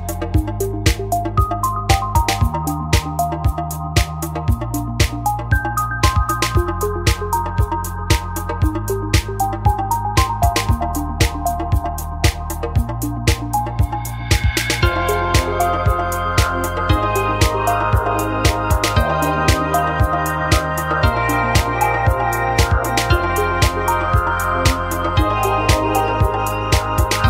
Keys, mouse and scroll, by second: 2.1 ctrl+z, 5.7 Tab, 7.7 KP_1, 9.0 e, 10.8 click, 11.5-13.0 middle drag, 13.5 a, 14.1 ctrl+z, 14.3 ctrl+z, 14.4 ctrl+z, 14.7 middle click, 16.0 KP_1, 16.3 KP_3, 17.3 a, 18.2 ctrl+r, 19.7-21.4 drag, 21.9 ctrl+r, 22.4-23.4 drag, 25.4-27.2 right drag.